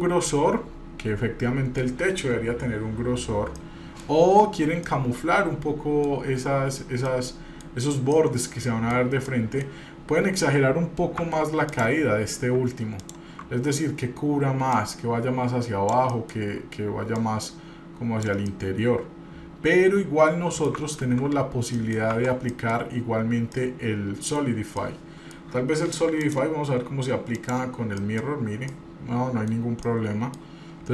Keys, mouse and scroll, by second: 3.4 scroll down 2, 3.9 middle click, 4.4-5.0 scroll up 1, 5.0-6.3 middle drag, 6.8-7.1 scroll up 1, 7.3-7.8 middle drag, 7.8 scroll down 1, 8.2-9.1 middle drag, 8.4 scroll down 2, 9.5-10.4 middle drag, 9.5 scroll up 1, 11.4 Tab, 11.9 click, 13.2 ctrl+click, 14.9-16.2 drag, 16.3 middle click, 17.3-18.4 drag, 18.7-20.9 middle drag, 21.4 ctrl+z, 22.1 middle click, 22.3 Tab, 22.7 middle click, 23.1-23.8 scroll up 1, 23.8 middle click, 24.6 scroll down 2, 24.9 middle click, 26.4-27.7 drag, 28.2 middle drag, 28.9-29.7 middle drag, 28.9 scroll up 2, 29.8 scroll down 1, 30.0-30.6 middle drag, 30.7-30.9 scroll up 1.